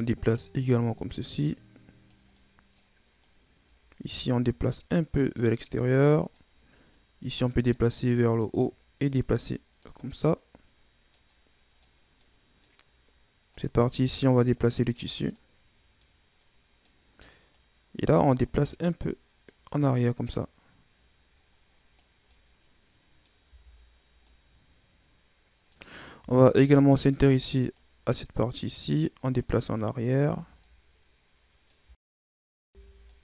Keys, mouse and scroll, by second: 1.3 right click, 2.3 middle click, 3.2 right click, 5.5 scroll down 2, 5.7-6.8 middle drag, 6.8 right click, 7.6-8.9 middle drag, 8.9 right click, 9.9 scroll down 2, 10.2-12.7 middle drag, 12.7-13.4 scroll up 2, 13.4 right click, 15.2-16.8 middle drag, 16.8-17.4 scroll up 1, 17.4 right click, 18.7 right click, 19.8 right click, 22.2-23.4 middle drag, 23.4 Tab, 23.8-24.2 scroll down 4, 24.2-25.8 middle drag, 25.8 scroll up 1, 26.1 Tab, 26.5 scroll down 3, 26.7 middle click, 27.6 right click, 29.9-30.5 scroll down 4, 30.5-31.7 middle drag, 31.7 Tab, 32.6 Tab, 33.0 middle click.